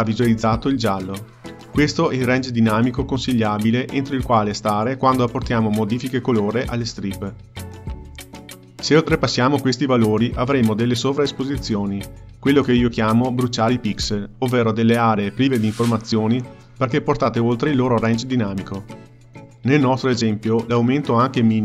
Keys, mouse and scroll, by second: 13.3 click, 14.2 h, 21.3 click.